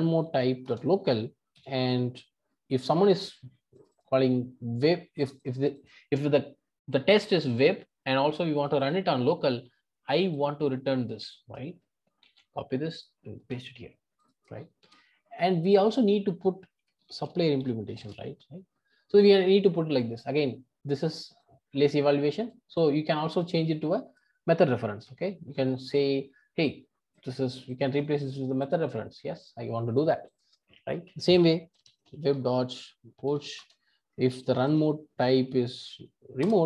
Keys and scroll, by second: 12.2 super+c, 13.4 super+v, 25.0 alt+Return, 27.9 alt+Return, 33.6 Return, 36.4 Return.